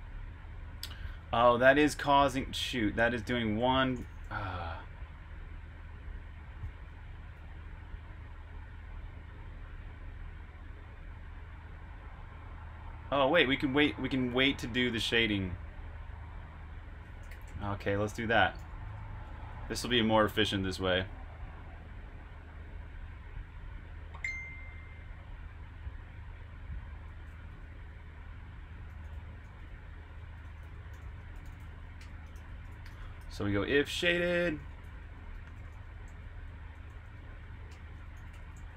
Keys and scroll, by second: 1.2-2.7 typing, 5.0-5.8 typing, 6.8 Escape, 7.5 typing, 11.2-11.6 typing, 13.0-14.1 typing, 15.9 typing, 17.1-19.7 typing, 22.1 typing, 26.9-33.7 typing.